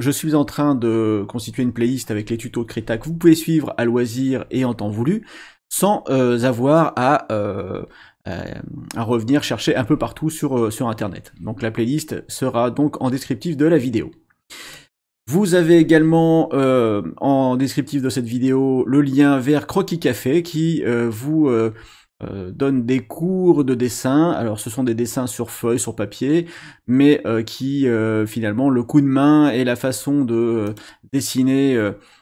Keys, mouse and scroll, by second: 14.7 click, 19.4-21.2 scroll down 8, 30.6 click.